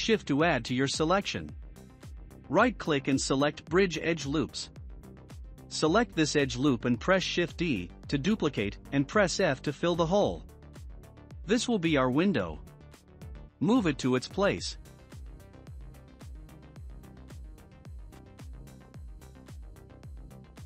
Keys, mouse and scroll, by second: 1.0 shift+middle click, 1.8 scroll up 1, 2.5 2, 3.9 click, 4.1 click, 4.7-10.0 middle drag, 10.0 s, 14.5-17.5 drag, 19.1 Tab, 19.8 click, 20.1 scroll down 2.